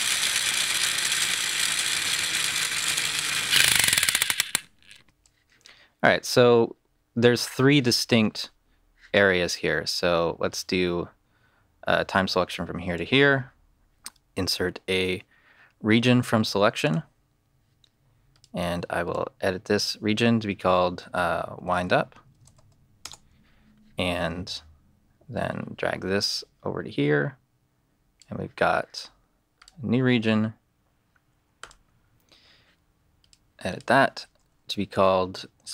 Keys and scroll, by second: 5.0 space, 21.3-22.5 typing, 23.0 Return.